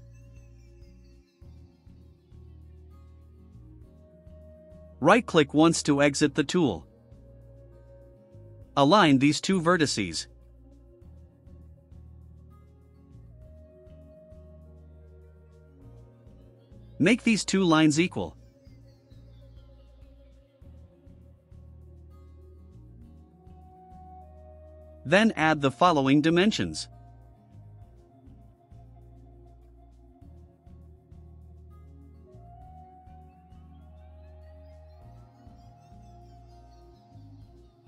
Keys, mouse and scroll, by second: 0.9-1.3 scroll down 4, 1.5-1.9 scroll up 2, 2.3 click, 2.7 click, 5.7 right click, 7.2 click, 8.1 ctrl+click, 14.7 click, 17.3 click, 18.5 ctrl+click, 21.5 click, 23.8 middle drag, 23.8 scroll, 24.1 right click, 24.5 middle drag, 24.5 scroll, 24.8 middle click, 24.8 scroll, 27.7 click, 28.9 ctrl+click, 30.0 click, 30.9 click, 31.6-32.6 typing, 33.1-33.8 scroll down 4, 34.8 click, 35.5 scroll up 2, 36.2 click, 37.3 click.